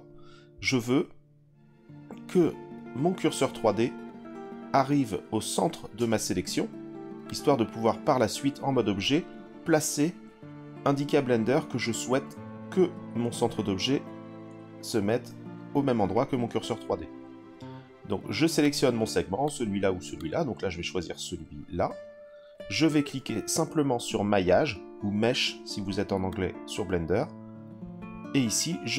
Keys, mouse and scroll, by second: 7.3 click, 18.6 click, 19.4 click, 20.1 click, 26.3-28.9 drag.